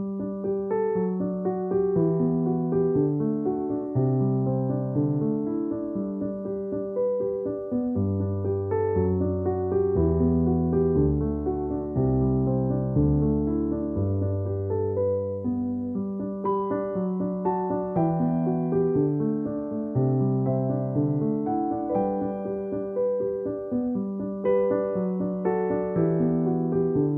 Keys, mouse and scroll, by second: 3.6-6.6 typing, 9.7 space, 11.5-14.0 typing, 13.9 click, 15.3 space, 16.1 ctrl+click, 16.3 ctrl+e, 17.5 space, 17.7 click, 17.9 space, 19.2 ctrl+m, 20.1 click, 22.4 right click, 24.7 click.